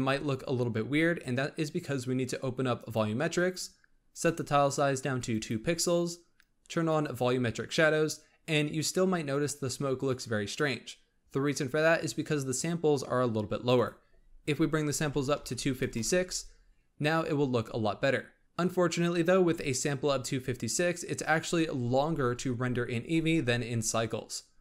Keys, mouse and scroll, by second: 2.7-7.3 drag, 13.7-17.5 drag.